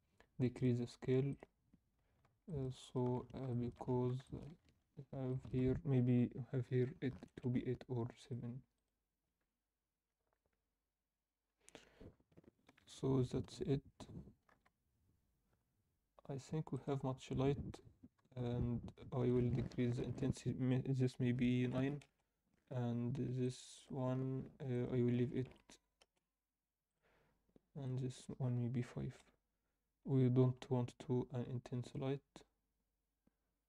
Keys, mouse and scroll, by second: 0.5-1.5 drag, 1.8-2.3 scroll down 4, 2.5 alt+shift+middle click, 2.7 shift+middle click, 3.2-3.9 scroll up 4, 3.5 alt+shift+middle click, 4.2 shift+middle click, 4.5 scroll up 1, 5.2-7.7 shift+drag, 8.2-9.8 drag, 12.1 scroll down 2, 12.8 Tab, 13.5 KP_0, 14.5 alt+a, 16.9-17.2 drag, 17.2-18.2 scroll down 2, 18.2 KP_7, 19.2-23.2 drag, 23.4-27.7 drag, 25.4 1, 28.5-30.4 drag, 30.4 KP_0, 32.8 click.